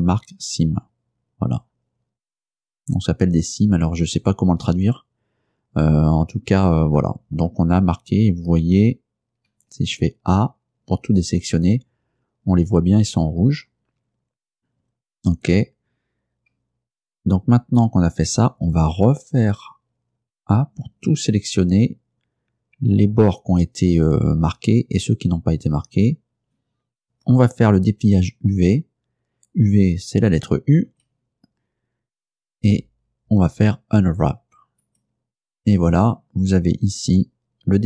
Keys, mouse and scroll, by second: 2.6 click, 9.6 a, 20.4 a, 31.0 u, 34.9 click.